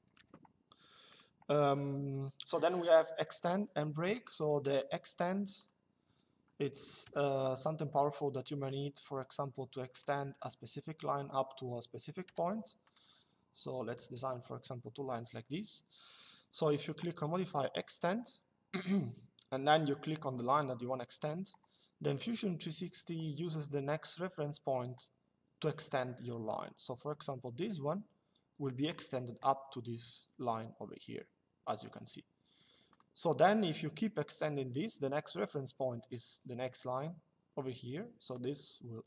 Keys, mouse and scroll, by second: 0.8 click, 2.7 click, 5.8 Escape, 6.7 l, 8.3 click, 9.6 click, 10.0 Escape, 13.8 Escape, 16.4 click, 20.1 click, 32.6 click, 38.0 click.